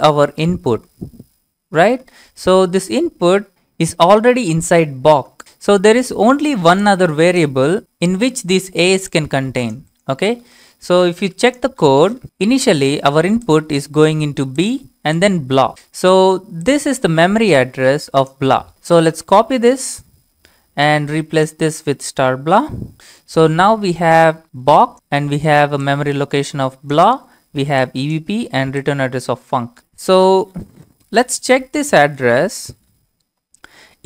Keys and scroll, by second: 5.3 alt+Tab, 10.6 alt+Tab, 11.2 alt+Tab, 19.0 ctrl+c, 19.7 alt+Tab, 21.6 ctrl+v, 22.9 BackSpace.